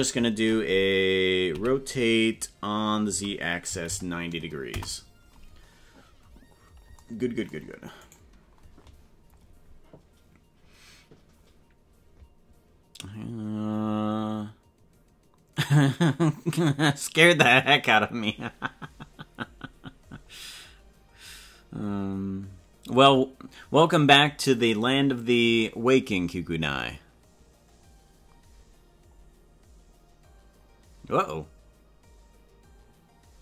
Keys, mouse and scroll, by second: 1.5 r, 8.1 right click.